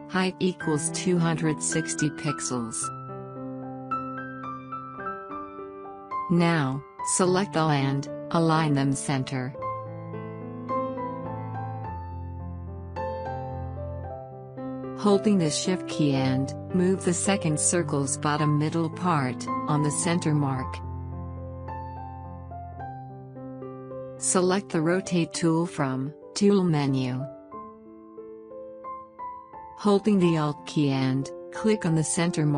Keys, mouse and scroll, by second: 0.7 Tab, 3.1-9.1 drag, 9.5 click, 15.1-24.6 drag, 28.4 click.